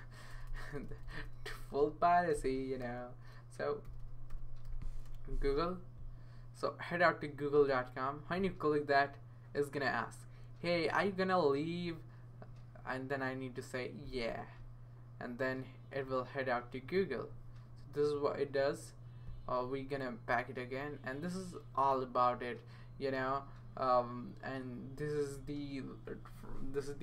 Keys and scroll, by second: 0.3-1.2 typing, 2.3-5.6 typing.